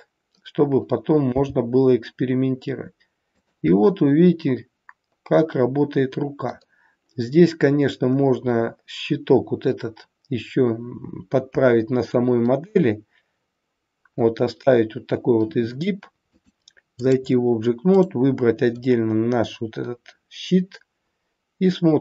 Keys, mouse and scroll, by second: 1.3 g, 3.7 middle click, 6.3 scroll down 1, 8.1-9.5 scroll up 2, 14.3 scroll down 1, 16.2 click, 18.0 click, 18.7 middle click.